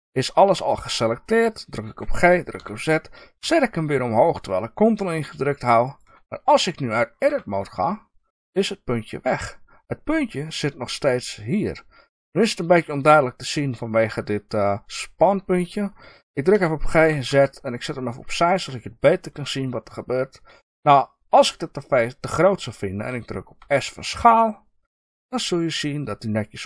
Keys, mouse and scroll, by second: 1.8 g, 5.9 ctrl+click, 7.2 Tab, 18.4 ctrl+click.